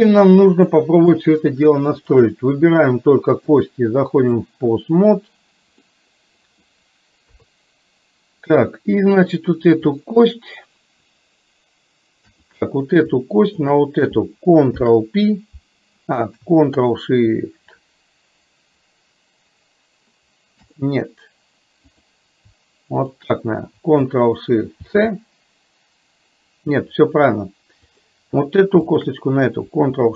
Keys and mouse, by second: 0.7 click, 3.5-4.5 drag, 5.8 middle click, 7.3 KP_3, 9.2 click, 12.6 click, 13.6 shift+click, 14.7 ctrl+p, 20.7 click, 22.0 click, 28.0 click, 29.0 shift+click.